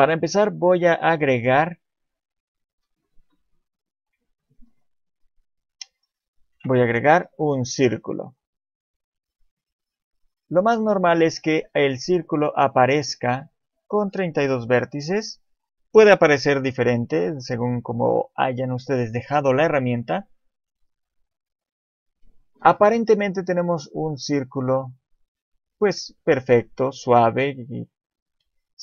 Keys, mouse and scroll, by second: 2.7 click, 4.8-5.2 scroll up 1, 5.7 scroll up 4, 6.5 shift+a, 10.1 scroll up 1, 10.8 shift+middle click, 10.8-11.3 scroll up 4, 11.4-12.5 scroll down 1, 12.5 click, 12.5 scroll down 1.